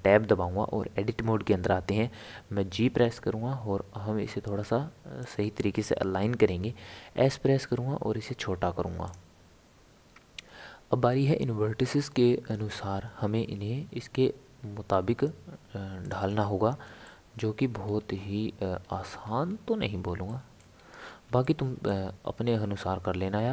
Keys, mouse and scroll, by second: 2.6 g, 7.3 s, 12.6 r, 17.0-17.7 shift+middle drag, 17.7 scroll up 2, 18.0 scroll down 1, 18.1-19.2 scroll up 2, 19.2 scroll down 1, 19.5-20.0 scroll up 1, 20.0 scroll up 1, 20.3-20.7 shift+middle drag, 20.7 scroll up 1, 21.4-23.5 shift+middle drag.